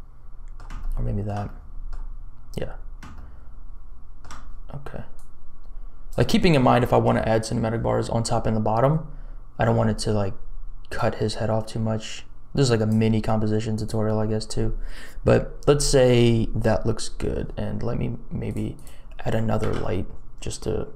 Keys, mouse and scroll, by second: 0.8 shift+middle click, 1.4 middle click, 3.2-4.2 shift+middle drag, 5.1-6.5 drag, 11.0-12.9 drag, 13.7 click, 18.5 click, 19.6 shift+a.